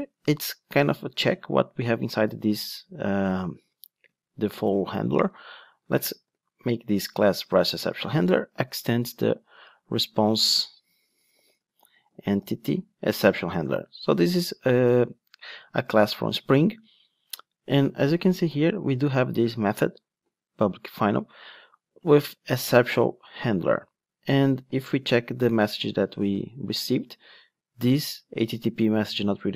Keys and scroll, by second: 8.0 Return, 13.2 Return, 15.7 super+b, 25.0 super+f, 25.1 super+v.